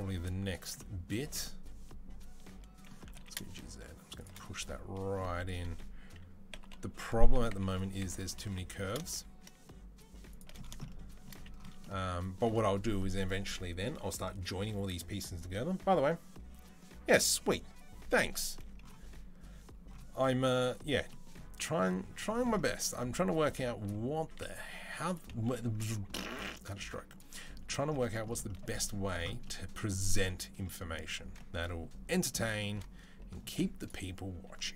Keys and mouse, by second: 0.8-1.9 middle drag, 2.1-4.4 middle drag, 2.8 g, 4.4 click, 4.4-22.9 middle drag, 4.4 g, 5.3 r, 22.9 click, 23.7-33.6 middle drag, 24.1 s, 25.3 g, 26.6 s, 33.6 click, 33.7-34.7 middle drag, 34.1 g.